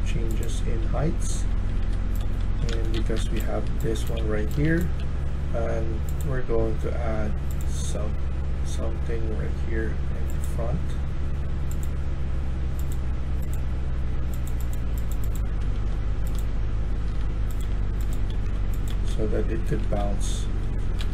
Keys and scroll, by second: 1.1-4.6 typing, 15.1-20.4 typing, 20.8 Escape, 21.0 Escape.